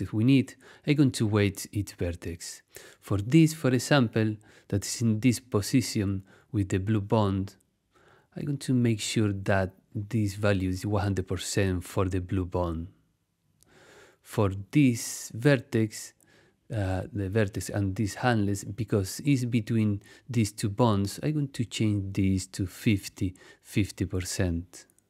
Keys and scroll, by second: 22.7 5, 23.1 0, 23.9 Return.